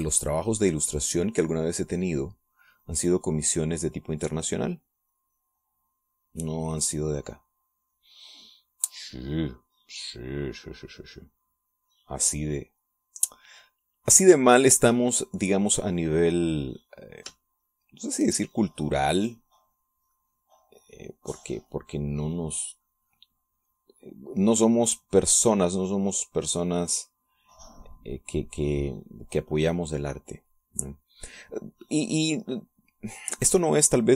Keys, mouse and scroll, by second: 0.2 middle click, 1.1-7.3 drag, 8.3-11.3 drag, 12.0-15.2 drag, 15.8 middle click, 18.7 shift+click, 19.7-29.8 shift+drag, 29.9 click.